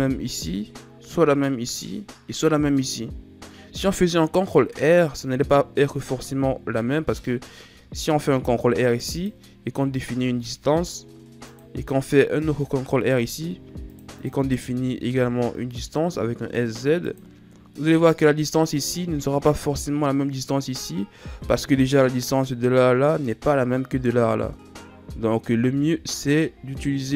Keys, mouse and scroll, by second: 7.6 ctrl+r, 9.7 s, 12.5 ctrl+r, 14.5 s, 25.4 ctrl+z, 25.8 ctrl+z.